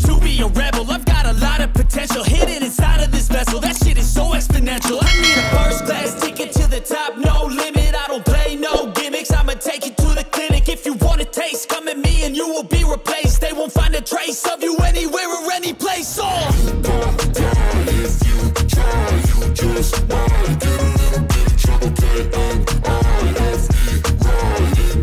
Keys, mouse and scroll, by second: 0.6 ctrl+space, 0.9 scroll down 1, 1.2 click, 3.5 ctrl+g, 4.5-6.3 drag, 6.3 ctrl+right click, 6.9 click, 8.6 scroll up 1, 8.9 click, 9.8 scroll up 1, 10.3 shift+click, 10.5-10.8 scroll down 1, 12.0 shift+Page_Down, 12.7-13.0 scroll up 1, 13.2 click, 13.5 scroll down 1, 14.2 click, 15.5-19.9 ctrl+drag, 24.9 click.